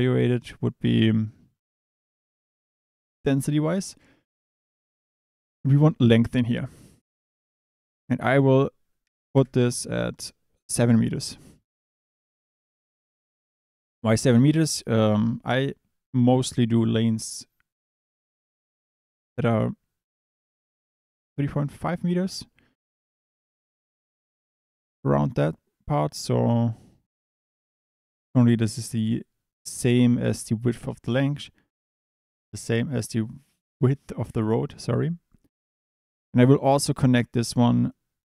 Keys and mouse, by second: 4.6-5.7 drag, 7.9-9.3 drag, 26.7 click, 36.7 drag.